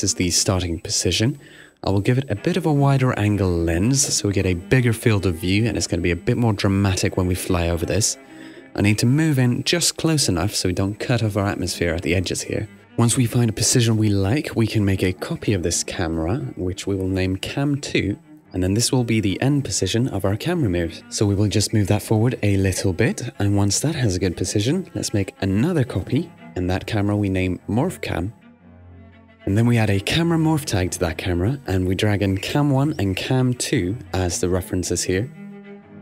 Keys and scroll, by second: 0.0-1.5 typing, 2.9-3.7 typing, 17.1 2, 25.5-27.6 typing.